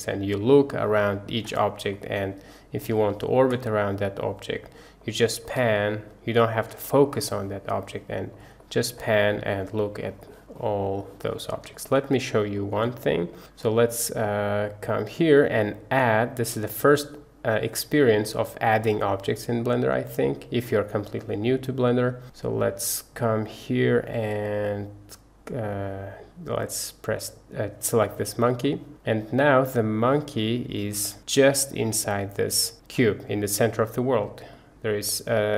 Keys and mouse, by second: 0.4-0.7 shift+drag, 1.0 shift+drag, 2.0-2.8 drag, 3.1-3.4 shift+middle drag, 3.7-5.1 middle drag, 5.2 shift+middle drag, 5.7-6.6 middle drag, 6.9 shift+middle drag, 7.2-8.4 middle drag, 8.7 shift+middle click, 9.0-10.0 middle drag, 10.3 shift+middle click, 11.0 shift+middle click, 11.8 shift+middle click, 12.6 shift+middle click, 15.4-27.4 middle drag, 28.9 middle click, 29.7 middle click, 31.1 middle click, 32.1-32.7 middle drag, 34.6-35.5 middle drag.